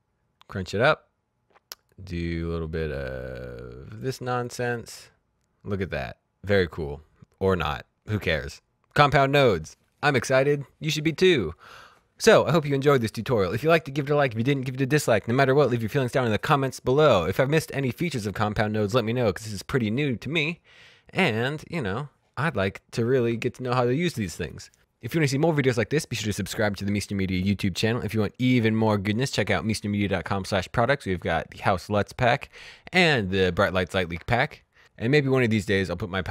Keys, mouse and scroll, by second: 0.2-1.0 scroll up 1, 1.8 click.